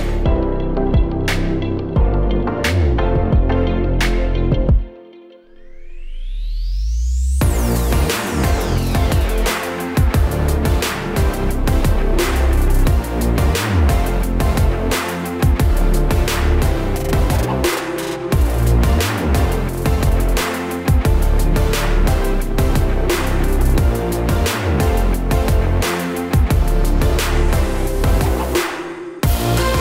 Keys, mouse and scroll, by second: 2.6 click, 4.2 middle click, 5.1-5.4 scroll down 3, 5.4 middle click, 6.3 middle click, 8.2 click, 9.3 shift+d, 10.1 click, 11.5 middle click, 12.2 click, 13.1 shift+d, 13.9 click, 16.4 middle click, 17.5 scroll down 1, 17.9 click, 18.6 click, 21.0 KP_0, 21.6 space, 23.5 click, 25.5 click, 26.5 click, 26.9 click, 27.5 click, 28.2 click, 29.2 shift+a.